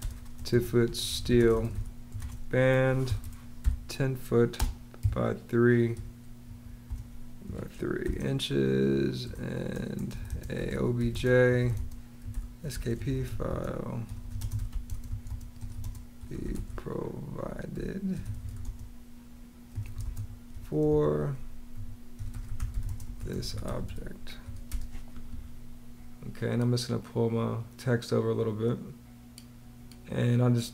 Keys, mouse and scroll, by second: 0.0-7.9 typing, 9.1 Return, 9.8-24.5 typing.